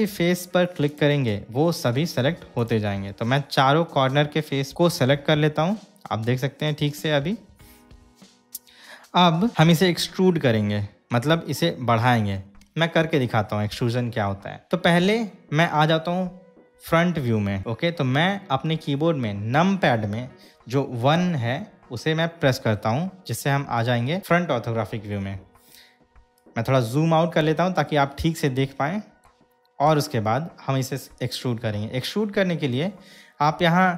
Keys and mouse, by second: 1.0 shift+click, 2.7 shift+click, 4.7-9.5 middle drag, 22.7 KP_1, 27.9-29.5 shift+middle drag.